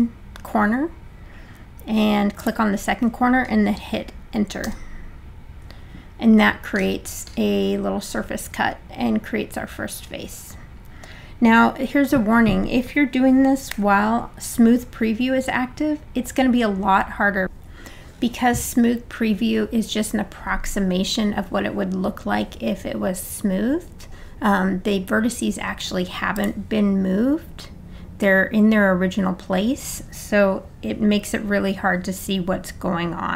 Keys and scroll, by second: 4.7 Return, 13.7 3.